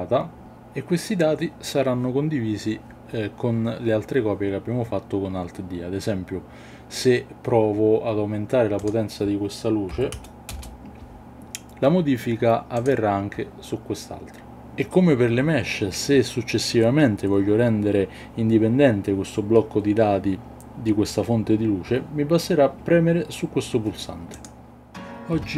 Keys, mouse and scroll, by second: 8.8-10.9 drag, 24.3 click.